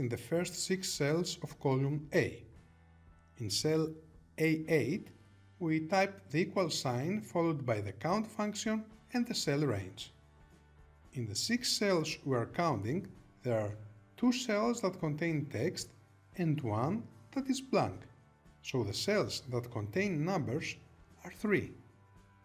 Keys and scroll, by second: 21.0 Return.